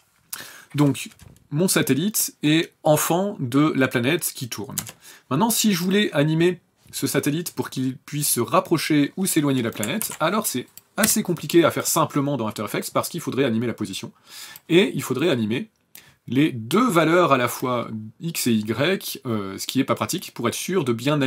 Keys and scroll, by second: 4.8 KP_0, 10.0 ctrl+z, 11.0 p.